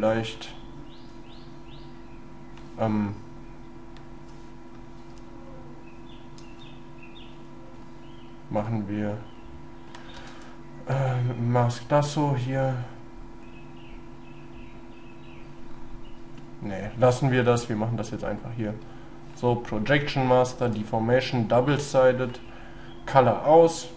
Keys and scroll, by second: 10.2 space.